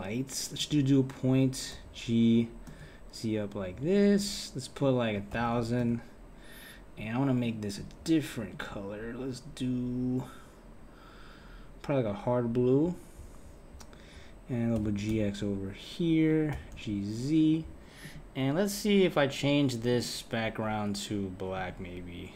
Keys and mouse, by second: 1.7 g, 4.8 click, 5.4 KP_0, 5.6 KP_0, 6.9 click, 7.7 click, 14.8 g, 16.5 g, 18.0 click, 19.9-21.7 drag.